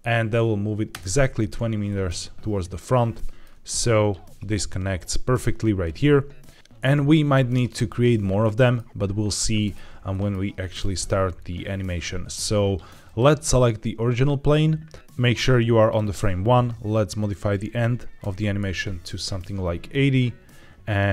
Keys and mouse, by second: 0.8 KP_Enter, 1.8-2.7 middle drag, 3.0-3.3 shift+middle drag, 3.5 click, 5.8-6.5 middle drag, 7.0-7.6 middle drag, 8.3-8.6 middle drag, 9.5 middle click, 10.0 shift+middle drag, 13.0 click, 15.4 click, 17.2-18.5 drag.